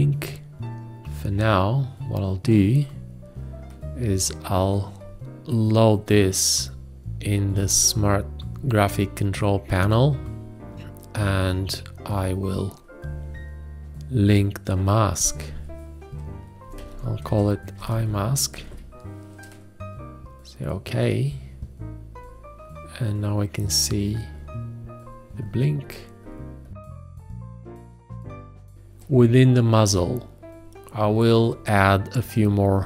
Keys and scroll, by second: 16.4-19.8 typing, 27.4 ctrl+s, 27.6 ctrl+a.